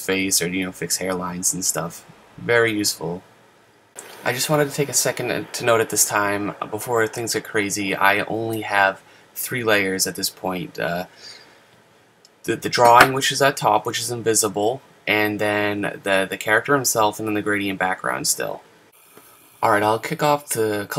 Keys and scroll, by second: 1.0 super+z.